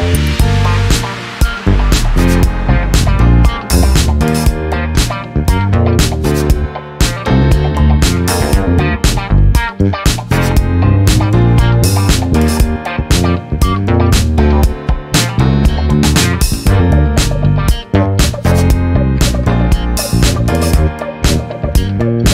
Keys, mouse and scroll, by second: 0.0 KP_Enter, 1.5 click, 3.3 click, 4.1 BackSpace, 4.9 KP_Enter, 6.4 click, 7.1 BackSpace, 7.6 KP_3, 7.8 KP_Enter, 9.5 click, 10.4 KP_5, 10.6 KP_Enter, 12.6 click, 15.0-18.2 drag, 19.8 click, 20.9 KP_4, 21.1 KP_Enter.